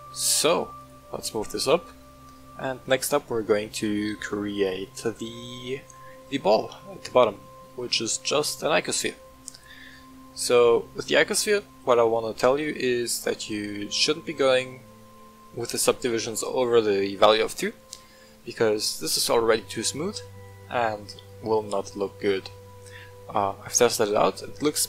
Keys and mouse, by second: 0.0 z, 0.7 click, 1.5-4.2 middle drag, 4.8-5.5 middle drag, 6.4 shift+a, 7.7 shift+a, 11.4-11.8 shift+middle drag, 13.1 middle click, 14.4-16.5 drag, 18.3-24.0 middle drag.